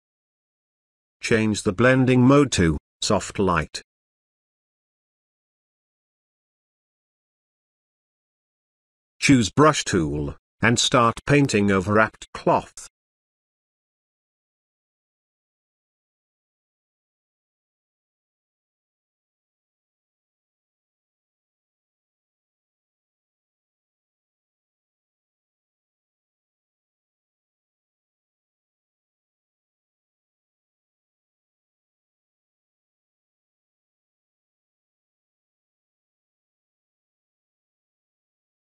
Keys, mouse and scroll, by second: 1.8 click, 8.0-11.6 drag, 15.2-16.5 typing, 15.6-16.6 click, 16.5 click, 16.6-18.8 drag, 21.2 space, 21.3 click, 21.4 space, 21.6-22.0 drag, 23.8 space, 23.9 click, 24.0 space, 24.7-25.9 drag, 26.1 space, 26.1 ctrl+drag, 27.5 space, 27.6 click, 27.7 space, 27.8-28.2 click, 28.1 space, 28.2-28.5 ctrl+click, 28.8 ctrl+click, 29.4 space, 29.5-29.9 click, 29.6 space, 29.6-31.2 ctrl+drag, 31.2 [, 31.4-35.2 drag, 35.3-38.2 drag, 38.3 space, 38.3 click, 38.5 space.